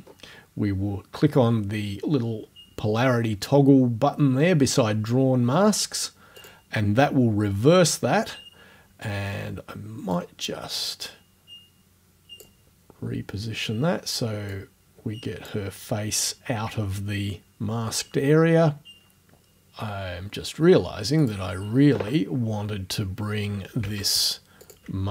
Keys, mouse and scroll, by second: 6.4 click, 10.2-12.6 drag, 14.5-15.6 drag, 21.2 click, 24.6 ctrl+click.